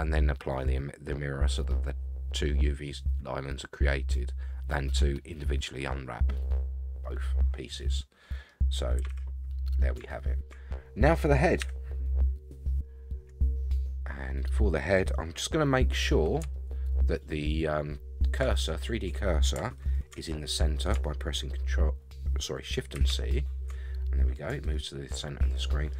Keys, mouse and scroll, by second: 6.3-7.0 scroll up 4, 7.0-8.5 middle drag, 9.0 a, 9.1 a, 9.7 scroll down 3, 10.2 shift+middle drag, 10.7 middle drag, 11.6 KP_1, 14.1-14.7 scroll down 2, 16.5-18.3 shift+middle drag, 18.6 scroll up 2, 22.9 shift+c, 23.8-24.7 scroll up 8, 24.7-25.9 shift+middle drag.